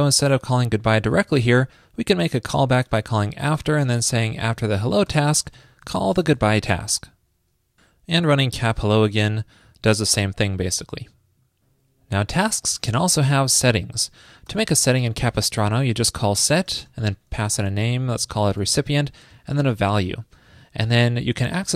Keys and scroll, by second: 6.6 super+s.